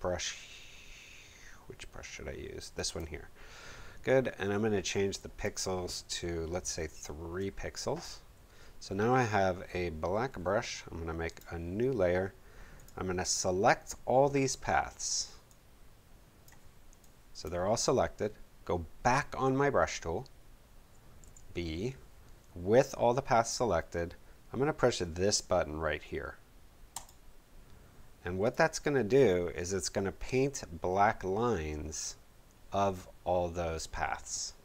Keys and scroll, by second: 6.8 3, 21.2 b.